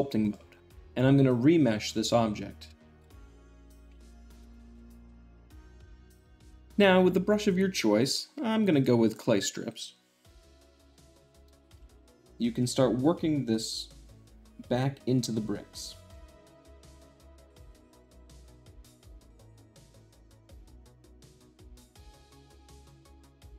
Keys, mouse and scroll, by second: 0.0 click, 0.6-0.9 middle drag, 1.6-2.6 drag, 2.9 click, 3.5 Tab, 4.0 Tab, 4.4 Tab, 5.6 click, 5.8 shift+middle click, 8.5-9.5 drag, 10.8 ctrl+click, 11.1 ctrl+click, 11.7 f, 12.0 ctrl+click, 12.4 ctrl+click, 12.8-13.8 ctrl+drag, 14.2-15.2 ctrl+drag, 15.6 ctrl+click, 15.7 ctrl+click, 16.2 ctrl+middle click, 16.5 ctrl+click, 16.7 ctrl+click, 16.9 ctrl+click, 17.0 ctrl+click, 17.2 ctrl+click, 17.3 shift+middle click, 17.6 ctrl+click, 17.7 click, 18.0 ctrl+click, 18.4 click, 18.6 click, 18.6 shift+middle click, 18.7 click, 18.8 Tab, 19.1 shift+click, 19.2 shift+middle click, 19.4 shift+middle click, 19.5 ctrl+click, 19.8 shift+middle click, 20.0 middle click, 20.4 ctrl+click, 20.6 ctrl+click, 20.8 click, 20.8 ctrl+middle click, 21.0 ctrl+click, 21.2 shift+middle click, 21.4 ctrl+click, 21.6 click, 21.7 click, 21.8 middle click, 22.1 ctrl+click, 22.6 ctrl+click, 22.7 `, 22.7 middle click, 23.1 ctrl+click, 23.5 ctrl+click, 23.5 middle click.